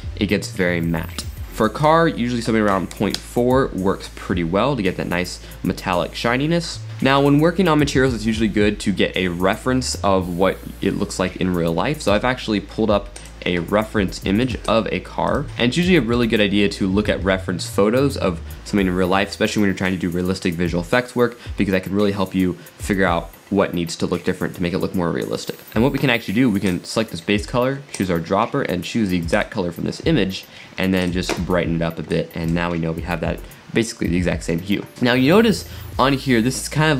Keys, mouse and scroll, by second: 5.6-6.9 middle drag, 6.9-9.3 drag, 13.2 click, 15.6-16.4 drag, 16.4-17.0 scroll up 8, 17.0 scroll down 2, 25.7 middle click, 26.7 click, 31.0 click, 34.9-36.9 middle drag.